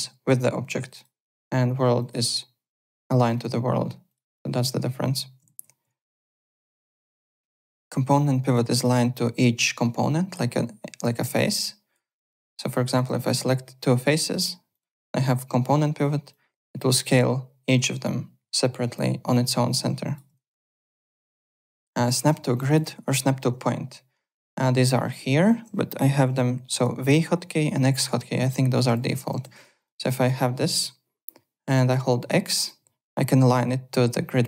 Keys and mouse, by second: 0.9 click, 2.0 click, 3.3 click, 4.1 click, 4.6 alt+click, 5.4 ctrl+z, 6.3 click, 8.5 click, 11.0 ctrl+d, 11.2 w, 11.5 click, 12.4 shift+click, 13.3 r, 14.7 click, 15.3 click, 16.3 click, 20.4 ctrl+z, 21.0 alt+Tab, 21.4 alt+click, 21.9 click, 22.6 click, 23.4 3, 23.8 w, 26.9 v, 27.7 x, 29.1 alt+click, 30.0 alt+click, 30.4 alt+middle click, 31.9 x, 32.6 click, 32.6 x.